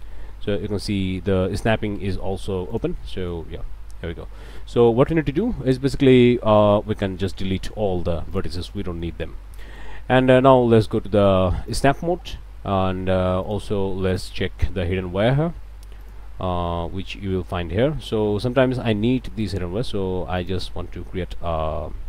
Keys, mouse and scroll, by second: 2.7 click, 3.1 middle click, 3.5 s, 4.6 click, 6.2 Escape, 6.6 click, 7.7 Delete, 8.3 click, 8.8 click, 9.3 scroll up 3, 9.6 shift+middle click, 11.7 middle click, 13.4 click, 14.1 click, 16.0 click, 19.4 right click, 20.4 click.